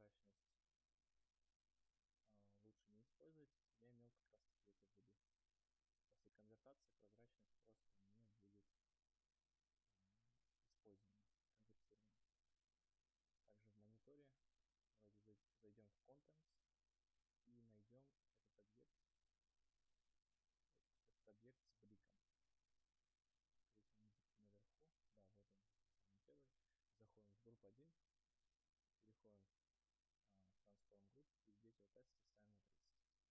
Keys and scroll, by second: 32.8 Return.